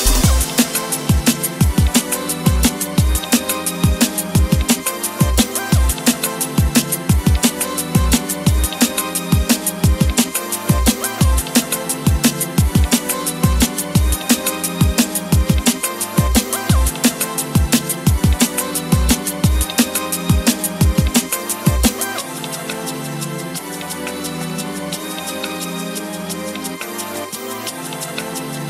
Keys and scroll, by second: 18.9 Escape, 19.9 Escape, 27.2 Escape, 27.4 Escape.